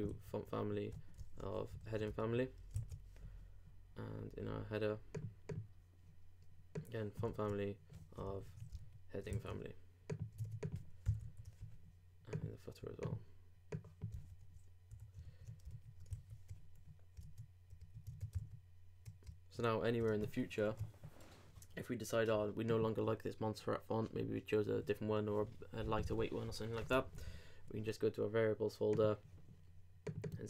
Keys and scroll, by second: 1.7 alt+Left, 2.2 alt+shift+4, 2.7 alt+shift+super+4, 3.7 super+s, 8.2 alt+super+v, 8.2 alt+super+Left, 8.8 alt+shift+4, 9.3 alt+shift+super+4, 9.3 shift+super+s, 10.3 super+s, 10.4 super+Tab, 11.0 super+;, 11.2 super+s, 14.9 super+;, 15.2 alt+Left, 15.7 alt+shift+4, 17.1 super+s, 17.2 super+Tab, 18.4 super+r, 20.1 super+Tab.